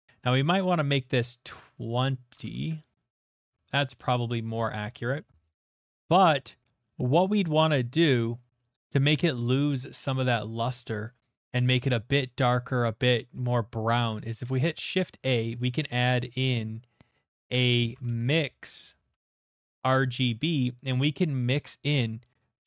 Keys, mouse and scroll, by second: 0.1 middle click, 1.9 middle click, 3.1 click, 3.3 Return, 3.8-4.5 scroll, 4.5 middle click, 4.8 shift+middle click, 4.9 shift+middle click, 5.5 middle click, 5.7 shift+middle click, 5.9 middle click, 6.8 shift+middle click, 7.9 middle click, 9.4 middle click, 9.6 shift+middle click, 9.9 middle click, 10.2 shift+middle click, 10.6 middle click, 10.7 shift+middle click, 10.9 click, 11.3 click, 11.6 middle click, 11.9 click, 12.5 middle click, 13.3 click, 14.3 typing, 15.0 click, 17.5-19.6 typing, 20.6 click, 21.4 click.